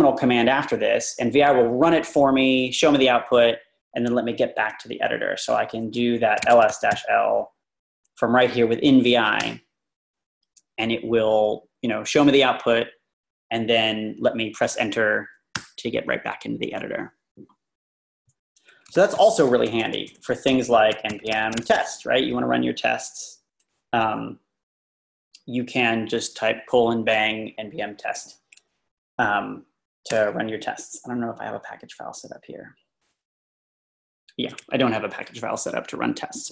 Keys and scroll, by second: 6.2-7.4 typing, 9.4 Return, 15.5 Return, 19.2-20.5 typing, 21.8 typing, 30.1 Return.